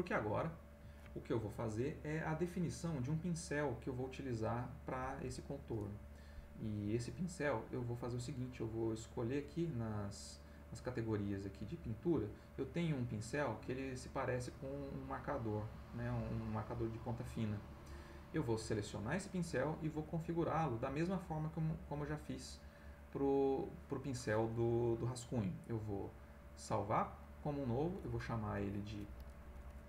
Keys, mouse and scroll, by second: 7.7 right click, 9.3 click, 11.3 click, 16.9 click, 20.2 click, 27.2 click, 28.6 click.